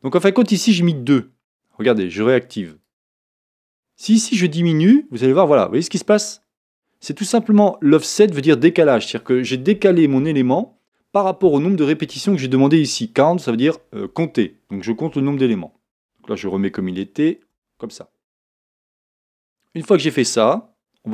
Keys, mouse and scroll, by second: 2.7 click, 4.1-19.3 drag, 16.8 z, 19.3-21.1 middle drag.